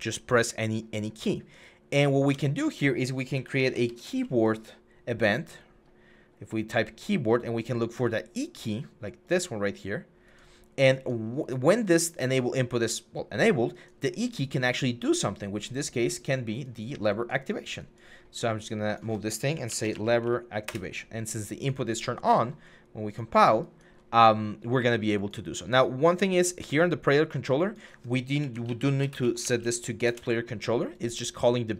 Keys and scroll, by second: 2.1 Tab, 3.1-3.9 typing, 19.3-19.9 typing, 20.4 Return, 27.9-29.4 typing, 29.8 Return.